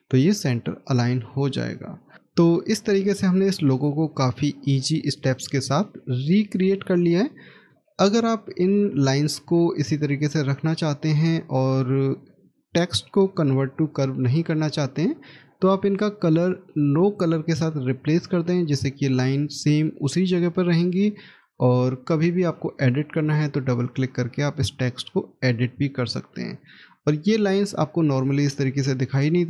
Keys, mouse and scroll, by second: 5.7 middle click, 7.6 middle click, 16.8 right click, 21.1 right click, 23.6 double click.